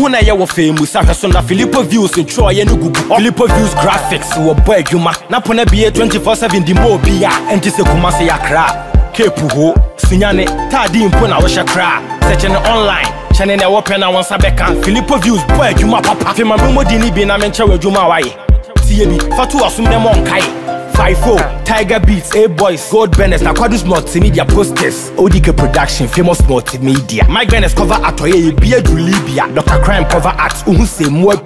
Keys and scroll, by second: 3.8 Return.